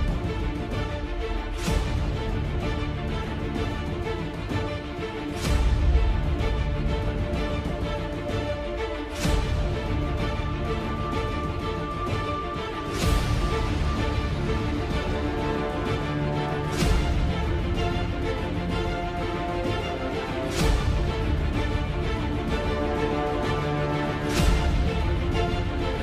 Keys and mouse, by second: 1.1 g, 4.0 z, 5.6 e, 10.1 KP_3, 11.8 middle click, 12.6 middle click, 13.8 KP_3, 15.1 KP_7, 18.1 s, 20.3 KP_3, 25.3 g.